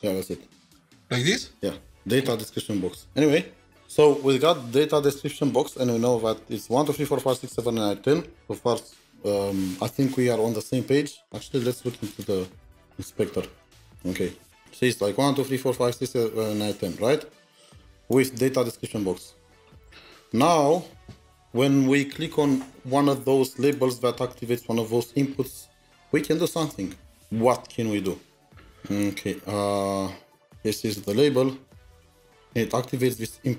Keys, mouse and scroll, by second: 13.7 double click, 15.3 double click, 15.4-16.9 scroll down 3, 24.3-24.7 scroll down 3, 24.7 double click, 27.9 double click, 28.0-29.7 scroll up 7, 29.7-31.1 scroll up 5.